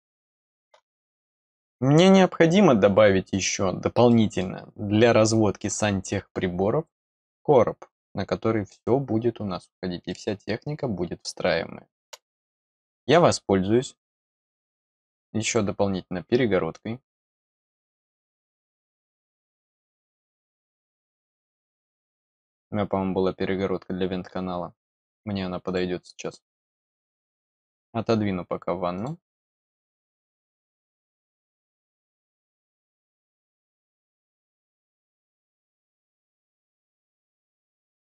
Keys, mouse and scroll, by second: 3.2-3.7 scroll up 1, 4.0 middle click, 10.0-12.0 middle drag, 15.3 click, 18.3 click, 18.5 click, 19.8 click, 21.3 click, 25.5 click, 27.5 click, 28.9 click, 29.9 click, 32.4 click, 33.2-35.0 drag, 36.4 click.